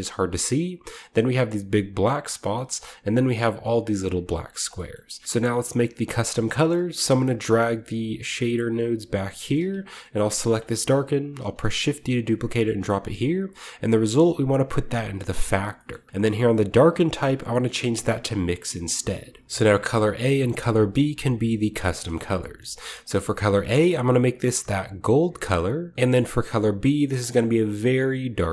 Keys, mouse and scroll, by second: 0.2-1.4 shift+middle drag, 0.2-1.4 shift+scroll up 2, 2.7-4.0 shift+middle drag, 4.0-5.2 scroll down 1, 4.8 shift+middle click, 5.2 ctrl+b, 5.2-5.9 scroll up 1, 6.4-8.0 drag, 7.3 g, 8.0-8.6 scroll down 1, 9.0-12.2 drag, 9.3-10.2 middle drag, 9.4-11.3 scroll up 1, 9.5-10.2 typing, 11.3 typing, 12.5 click, 12.6 click, 13.0-14.5 drag, 13.1-14.5 scroll up 1, 15.4-20.6 drag, 15.7 middle click, 19.4 ctrl+shift+z, 22.0-22.9 middle drag, 22.9 click, 23.8 click, 24.3 scroll up 1, 24.7 click, 25.9 ctrl+b, 26.5 click, 27.4 click, 28.4-28.5 drag.